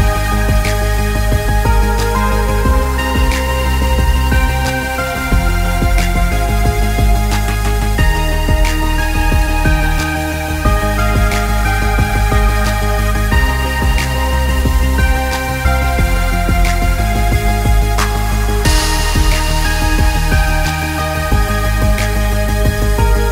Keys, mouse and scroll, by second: 0.1 Tab, 0.4 click, 1.3 shift+click, 2.0 g, 4.1 click, 4.3 middle click, 4.7 middle click, 5.7-6.5 scroll down 4, 6.1 KP_0, 6.7 KP_0, 7.4 click, 7.8 middle click, 8.2 scroll up 2, 8.4 middle click, 9.4 click, 9.8-10.2 scroll down 7, 10.4 click, 11.3 shift+d, 13.4 shift+d, 14.6 scroll up 4, 15.4 middle click, 16.4 shift+d, 18.4 middle click, 19.1 middle click, 20.2 click, 22.7 click.